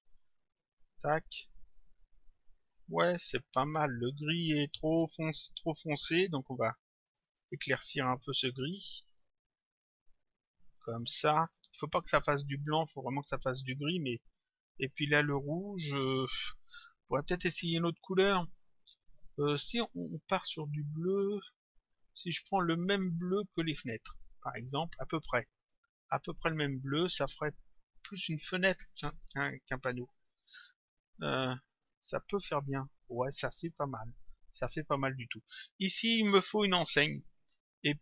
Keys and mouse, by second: 0.2 click, 7.1 click, 8.8 click, 11.5 click, 12.6 click, 15.3 click, 19.1 click, 22.8 click, 24.3 click, 27.9 click, 29.1 click.